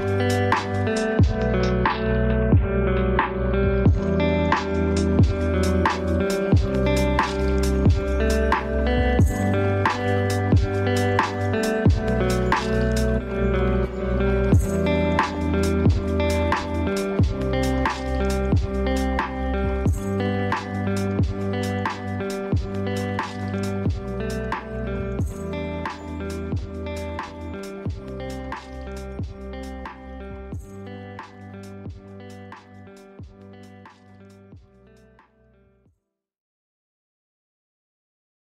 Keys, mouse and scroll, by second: 3.7 click, 7.5-17.1 drag, 19.7 click, 23.7-33.1 drag.